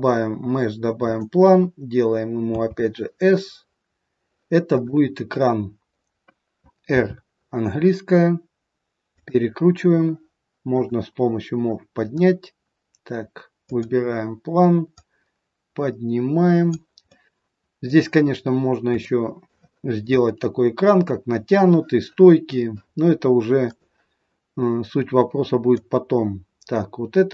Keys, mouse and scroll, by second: 2.5 s, 6.9 r, 10.7 click, 11.7 click, 13.7 click, 14.9 click, 17.0 middle click, 18.9 shift+middle click, 20.2 middle click, 23.7 click, 25.7 click.